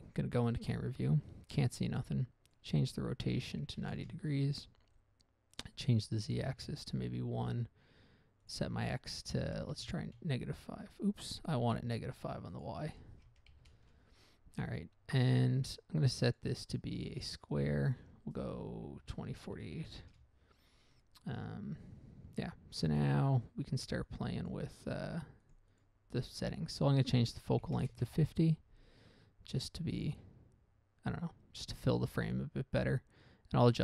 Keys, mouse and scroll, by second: 2.8 click, 4.0 typing, 4.3 Return, 5.9 click, 6.8 Return, 6.8 typing, 8.8 click, 10.1 typing, 10.4 Return, 12.3 ctrl+z, 12.9 click, 13.8 typing, 14.1 Return, 16.6 click, 17.9 click, 18.3 click, 19.4-20.0 typing, 20.3 Return, 24.4 click, 24.8 click, 25.8 click, 26.1 double click, 27.1 click, 28.0 typing, 28.2 Return, 33.6 click.